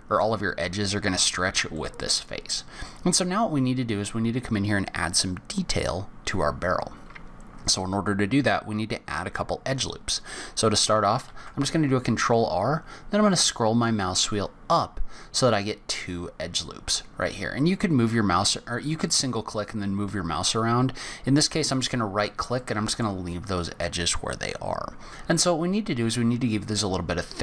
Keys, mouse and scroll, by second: 1.7 middle click, 2.6-3.0 scroll down 3, 3.0-4.7 scroll up 3, 11.2 ctrl+r, 22.6 middle click, 23.4-25.1 scroll up 1, 27.3-27.4 scroll up 3.